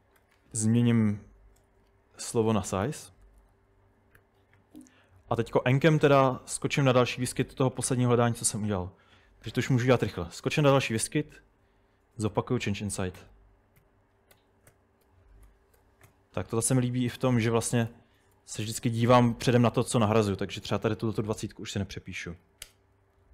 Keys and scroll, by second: 0.0-0.7 typing, 2.6-3.9 typing, 4.2 Escape, 10.1 typing, 11.4 typing, 13.2-16.6 typing, 17.9-19.6 typing, 22.0-22.7 typing, 23.2 super+Tab.